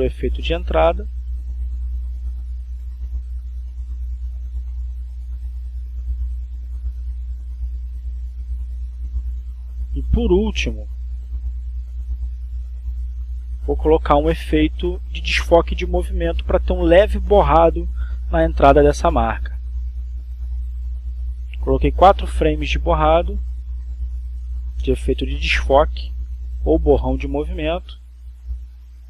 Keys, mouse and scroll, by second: 4.9 click, 5.7 click, 7.5 click, 8.6 click, 8.6-9.0 scroll up 1, 9.4-12.1 drag, 14.7 click, 15.8 click, 16.4 right click, 19.3 click, 21.0 click, 22.3 click, 23.4 4, 23.7 f, 24.5 Return, 25.5-27.2 drag, 28.0 click.